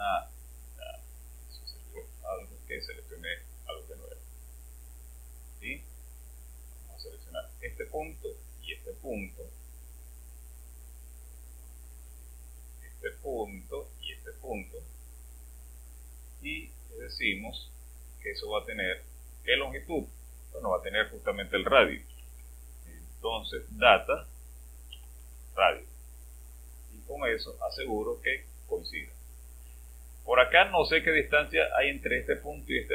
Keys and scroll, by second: 22.1-22.8 typing, 24.9 typing.